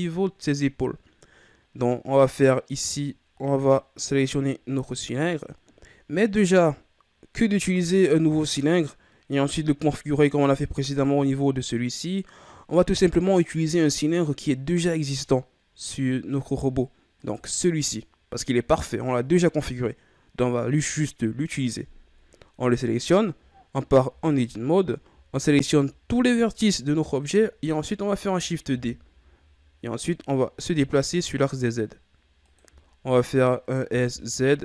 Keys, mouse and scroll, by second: 17.1 right click, 22.9-23.3 scroll down 1, 23.4-24.0 ctrl+scroll up 1, 24.0 Tab, 24.1 scroll up 1, 25.0 a, 25.4 a, 27.3-28.3 ctrl+scroll up 1, 28.6 shift+d, 32.8-33.4 ctrl+scroll up 4, 33.8 s.